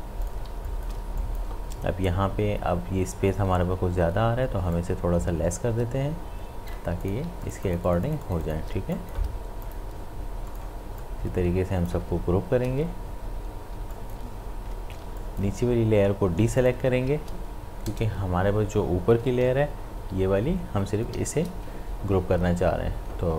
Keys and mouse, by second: 0.5 space, 0.7 ctrl+click, 1.0 ctrl+space, 1.2 click, 1.3 click, 4.8-7.0 drag, 7.2 space, 7.4 ctrl+alt+click, 8.8 ctrl+space, 9.0 click, 12.0 space, 13.9 ctrl+click, 15.0 space, 15.2 ctrl+click, 17.1 ctrl+space, 19.4 ctrl+shift+Up, 20.0 shift+Up.